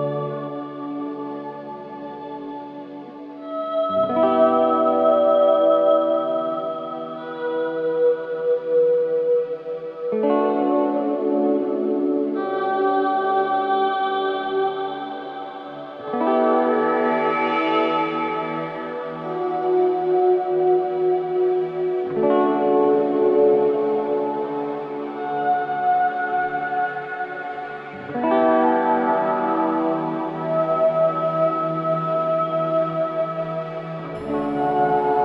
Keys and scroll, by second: 7.1 Escape, 13.7 Delete, 18.8 ], 21.0 ], 29.1 4, 30.6 2.